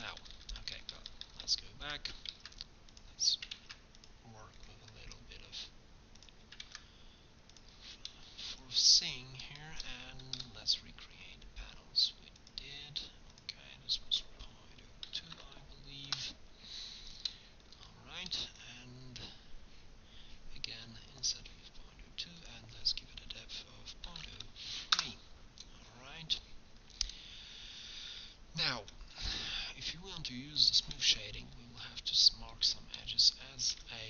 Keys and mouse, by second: 0.1-0.9 ctrl+z, 1.1 ctrl+z, 1.2 ctrl+z, 2.3 ctrl+z, 2.3 ctrl+Tab, 3.6 ctrl+Tab, 5.1 x, 6.7 ctrl+Tab, 7.9 click, 8.7 click, 10.4 i, 13.4-15.2 drag, 17.4-20.4 drag, 20.8 i, 22.4-24.2 drag, 26.5 click, 26.7 click, 28.9 Tab, 32.7 Tab, 33.8 Tab.